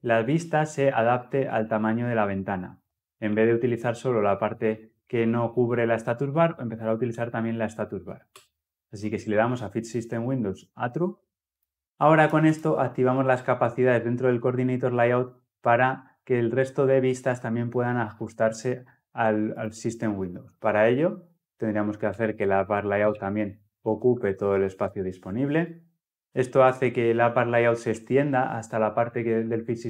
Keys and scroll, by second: 8.1 Return, 11.3 ctrl+F10, 23.7 Return, 26.1 ctrl+F10.